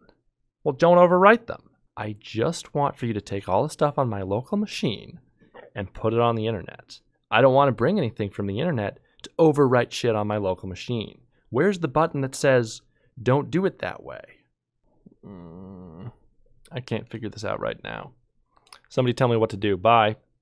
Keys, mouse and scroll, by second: 14.8 ctrl+Tab.